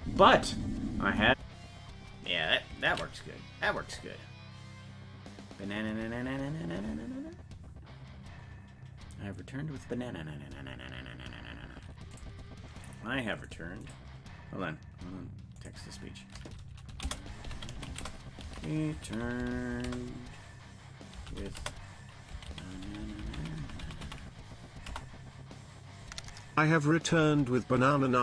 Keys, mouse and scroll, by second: 0.0 space, 3.3 ctrl+s.